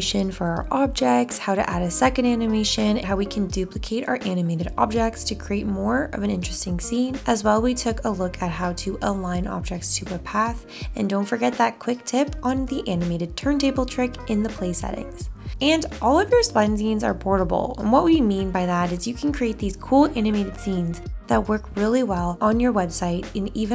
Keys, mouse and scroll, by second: 4.6 0, 5.7 0.